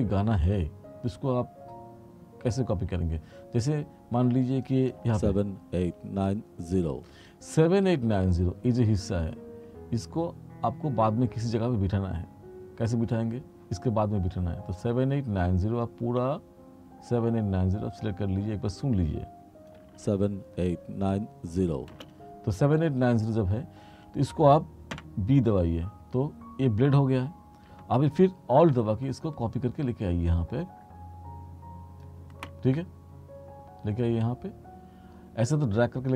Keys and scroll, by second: 5.1 space, 7.2 space, 19.9 space, 22.1 space, 25.0 b.